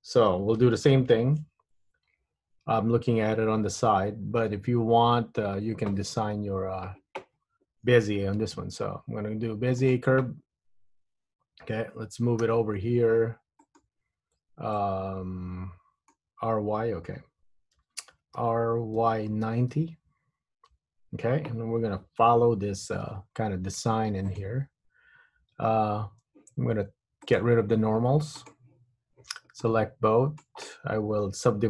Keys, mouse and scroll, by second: 1.6 KP_1, 3.4 KP_3, 4.3-4.7 scroll up 1, 4.7-5.6 scroll down 2, 6.1 Tab, 6.6 Tab, 8.6 shift+a, 12.5 g, 14.9 middle click, 16.2 scroll down 1, 17.9 KP_3, 18.4 r, 23.5 g, 25.6 Tab, 27.3 click, 29.7 click.